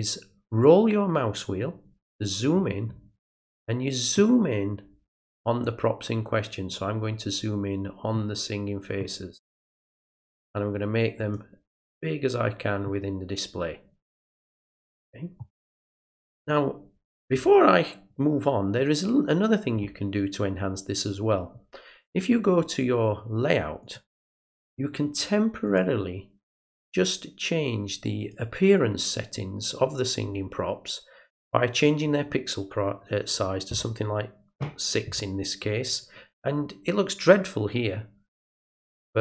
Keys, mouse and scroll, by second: 1.6-3.1 scroll up 1, 4.1-5.6 middle drag, 6.2-7.1 scroll up 3, 8.1 middle click, 9.5 middle click, 10.4 right click, 11.2 click, 11.9-15.3 middle drag, 23.8 click, 25.6 click, 28.2 click, 31.7 click, 38.5 click.